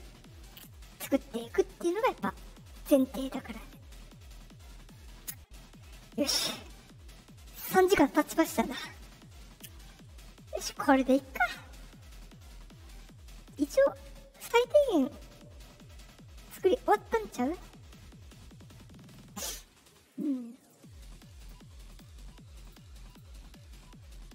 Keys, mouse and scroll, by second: 2.2 right click, 4.0 middle click, 20.0 click, 20.5 click, 21.3 click, 21.8 click, 22.5 click, 23.0 click.